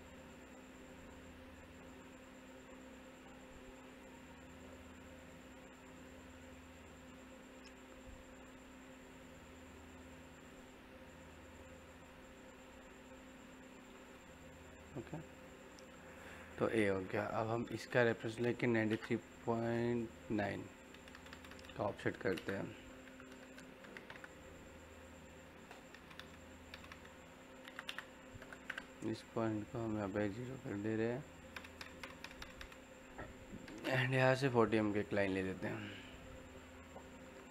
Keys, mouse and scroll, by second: 1.3 scroll down 1, 1.5 middle click, 3.8 click, 11.0 scroll up 1, 11.6 click, 12.3 scroll down 1, 12.5 middle click, 13.4 scroll down 1, 13.6 middle click, 15.6 scroll down 1, 15.7-18.7 middle drag, 18.7 l, 18.8 space, 19.8 click, 22.1 o, 22.3 space, 24.9 click, 26.4 middle click, 27.2-28.2 typing, 30.3 click, 33.6 l, 33.7 space, 34.9 click, 37.1 F8.